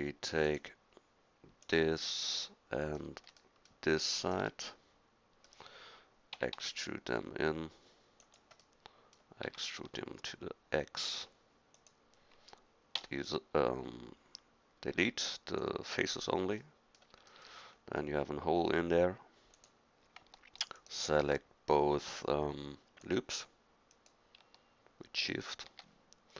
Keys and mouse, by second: 1.6 middle click, 2.4 middle click, 5.1 middle click, 6.4 e, 9.5 s, 13.0 x, 16.6-17.8 middle drag, 19.6-25.6 drag.